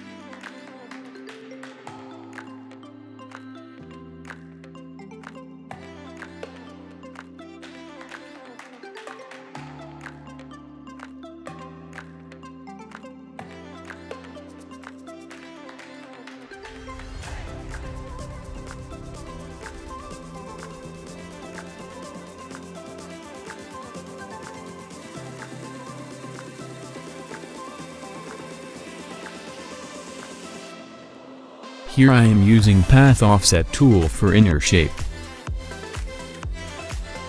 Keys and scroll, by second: 3.1 ctrl+y, 3.8 ctrl+alt+a, 8.5 ctrl+y, 10.9 v, 12.7 r, 14.9 ctrl+d, 15.1 ctrl+d, 15.3 ctrl+d, 15.9 v, 17.3 ctrl+c, 17.9 ctrl+f, 20.9 v, 24.3 Delete, 27.0 Delete, 29.7 r, 31.1 ctrl+d, 31.3 ctrl+d, 31.4 ctrl+d, 31.9 ctrl+v, 36.5 Down, 36.7 Up, 36.9 Down.